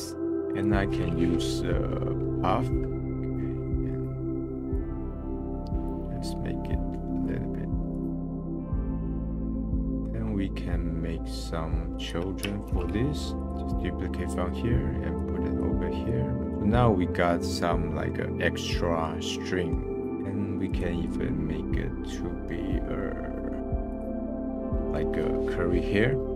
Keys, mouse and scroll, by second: 0.3 shift+a, 3.0 middle click, 3.1 scroll up 1, 3.7-4.7 middle drag, 4.7-8.1 drag, 8.1 middle click, 8.3 scroll down 4, 8.3 middle click, 8.5 scroll up 5, 8.6 click, 8.9 KP_0, 9.1 middle click, 9.2 scroll down 1, 9.4 scroll up 1, 9.6 click, 9.7 middle click, 10.6 scroll up 4, 12.0 click, 12.7 shift+d, 13.5 click, 14.3-14.7 scroll down 10, 15.1 click, 16.5 scroll up 1, 16.6-20.0 middle drag, 20.0-20.6 scroll up 10, 20.7 click, 21.4 scroll down 1, 21.7-23.6 middle drag, 23.6 shift+d, 24.4 scroll up 1, 24.7-25.9 middle drag, 25.9-26.3 scroll up 2.